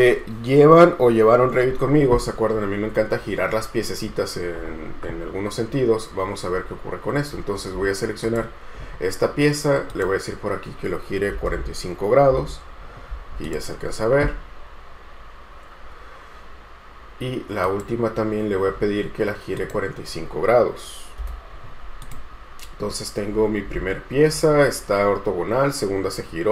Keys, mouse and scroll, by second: 6.7-9.7 scroll up 1, 11.3-12.2 typing, 12.5 Return, 21.4 Return.